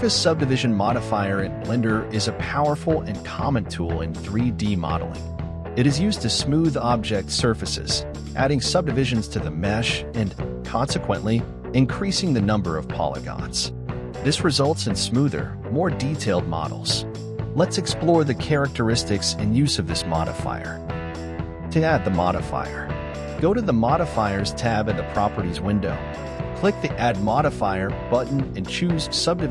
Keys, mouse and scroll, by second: 27.0-29.5 drag.